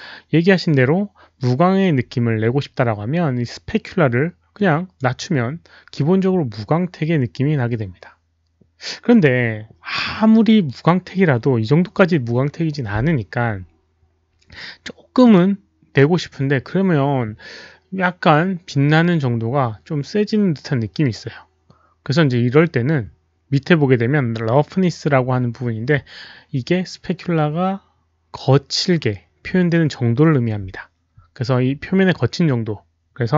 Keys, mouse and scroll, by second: 4.5-4.9 drag, 10.1 click, 15.2 click.